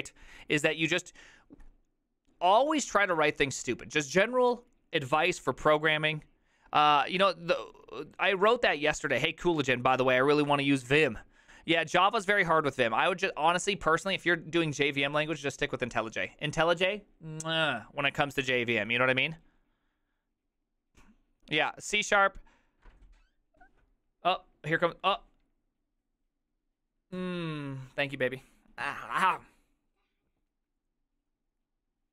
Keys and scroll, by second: 9.0 alt++.